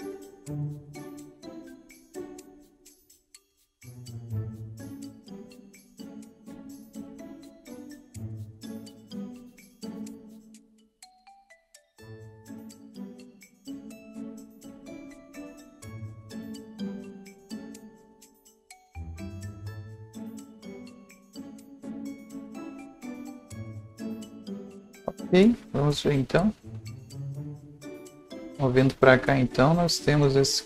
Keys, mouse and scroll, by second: 0.7 click, 1.9-3.4 drag, 4.7 ctrl+z, 4.7-10.3 drag, 10.1 scroll down 1, 10.2 right click, 10.3 scroll up 1, 10.7-18.9 drag, 16.9 right click, 19.5 click, 19.5 right click, 23.7-27.2 drag, 27.2-30.6 drag.